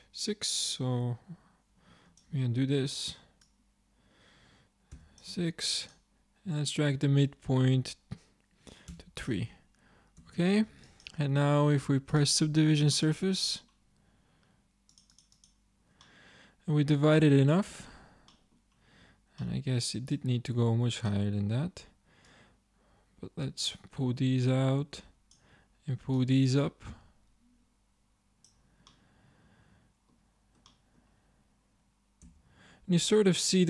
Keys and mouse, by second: 2.7 ctrl+z, 6.2 click, 10.3 Tab, 15.0-16.1 drag, 16.1-17.3 middle drag, 17.7 Tab, 20.6-21.9 drag, 22.8-23.9 drag, 25.0 click, 32.3 Tab.